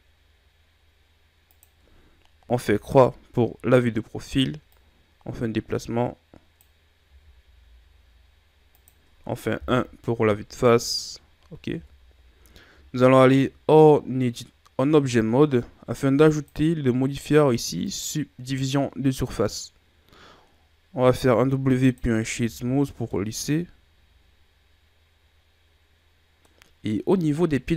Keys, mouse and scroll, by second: 2.7 KP_3, 4.8 click, 7.1 s, 9.7 KP_1, 11.8 Tab, 12.2-13.0 scroll down 2, 13.0 shift+scroll up 1, 16.4 click, 21.0 w, 22.5 a, 22.9 scroll down 1, 23.2-26.2 middle drag.